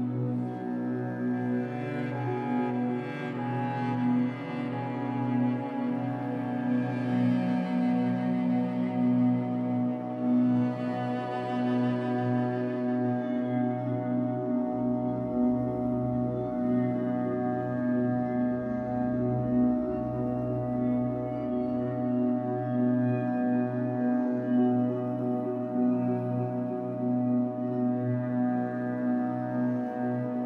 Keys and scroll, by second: 10.9 b, 13.8 Escape, 20.3 F8, 29.6 alt+x.